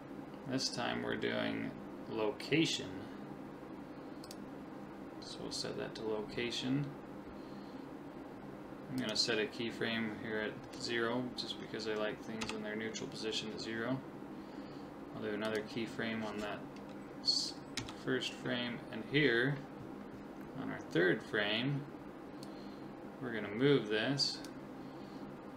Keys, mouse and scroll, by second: 9.0 click, 12.4 Right, 15.5-17.2 drag, 17.8 Right, 22.4 click.